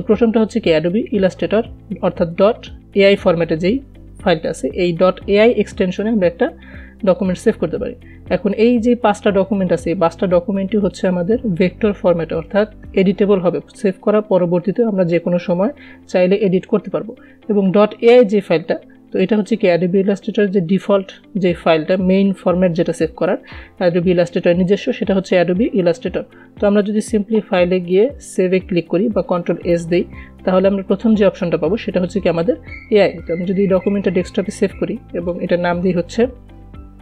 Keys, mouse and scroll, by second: 28.3 click, 34.2 click, 36.7-37.0 typing.